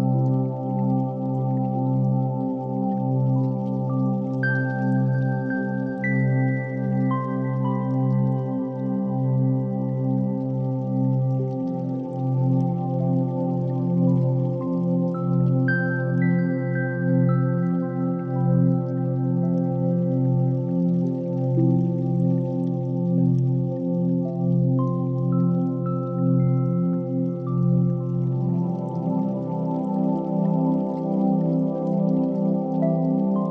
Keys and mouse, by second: 0.4-0.9 middle drag, 1.0 click, 1.4-2.2 middle drag, 2.7 click, 3.5 KP_3, 3.9 KP_1, 4.4 Tab, 5.0 1, 5.5 alt+z, 6.2 click, 7.0 g, 9.5 Tab, 9.9 alt+z, 10.4 click, 10.7-12.6 middle drag, 13.0 click, 13.5 shift+middle click, 14.2 Tab, 14.8 ctrl+r, 16.9 p, 17.7 Tab, 18.5 click, 20.0-22.8 right drag, 22.8 click, 24.3 drag, 26.0-27.5 shift+drag, 27.6 ctrl+z.